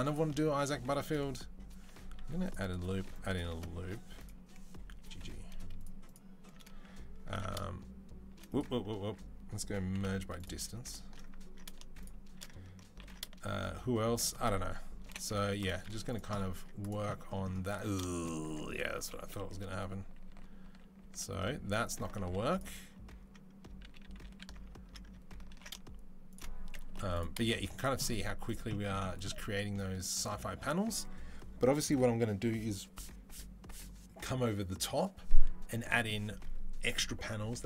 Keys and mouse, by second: 2.0 ctrl+r, 2.8 ctrl+r, 4.0 click, 4.7 g, 5.7 alt+middle click, 5.8 alt+click, 5.9-10.5 alt+middle drag, 7.1 ctrl+b, 8.8 a, 9.7 m, 10.6 alt+click, 12.8 ctrl+b, 14.8 Delete, 15.6 z, 16.4 Tab, 16.6 click, 17.8-23.5 shift+middle drag, 18.3 Tab, 18.9 ctrl+z, 19.1 ctrl+z, 19.3 ctrl+z, 19.4 ctrl+z, 19.6 ctrl+z, 19.8 ctrl+z, 20.1 ctrl+z, 20.4 ctrl+z, 20.8 ctrl+z, 21.2 ctrl+z, 21.5 ctrl+z, 22.0 z, 23.6 ctrl+z, 23.8 ctrl+z, 24.0 ctrl+z, 25.3 ctrl+b, 27.0 Delete, 27.3-28.3 middle drag, 27.3 z, 28.0 Tab, 28.3 click, 28.3-37.6 middle drag.